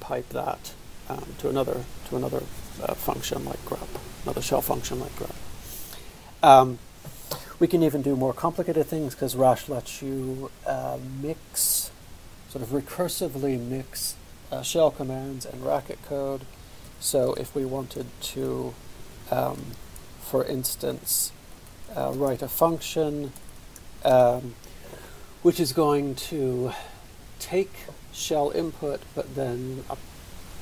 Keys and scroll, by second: 16.5-17.3 typing, 18.5-19.6 typing, 21.0-24.2 typing.